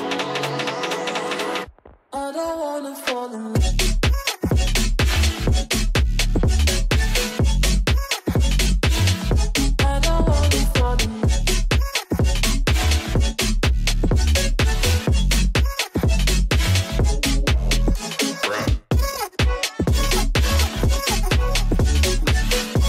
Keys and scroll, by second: 3.6 Escape, 3.9 F2, 7.9 b, 9.7 ctrl+space, 17.7 ctrl+z, 21.0 ctrl+space.